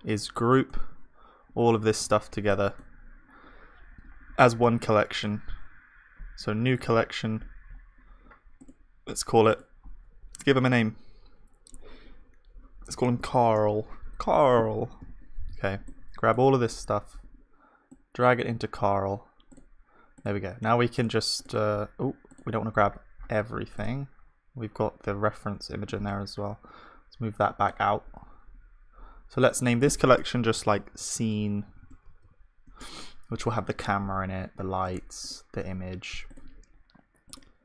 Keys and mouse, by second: 2.0 click, 2.0 v, 2.0 b, 3.7-6.8 middle drag, 6.8 right click, 7.4-15.0 middle drag, 15.0 b, 17.1-22.7 middle drag, 22.7-27.9 drag, 31.7 BackSpace, 35.2-37.6 drag.